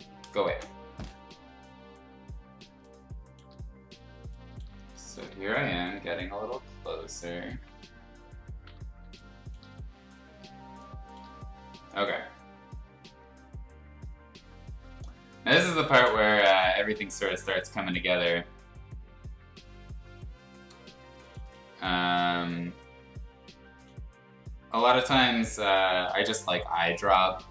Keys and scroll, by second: 0.4 ctrl+shift+z, 2.7 space, 4.1 space, 4.7 b, 5.8 ], 6.0 ], 7.5 ctrl+z, 9.0 space, 10.7 space.